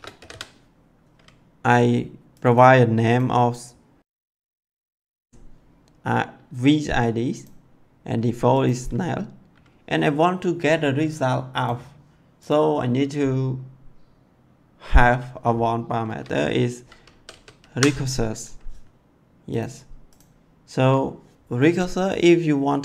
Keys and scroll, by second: 0.0-0.7 typing, 16.7-18.1 typing.